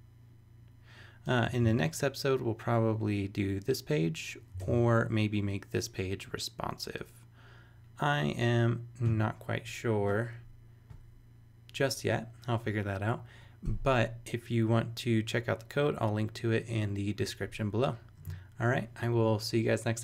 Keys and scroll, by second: 1.5 super+Tab, 4.6 super+Tab.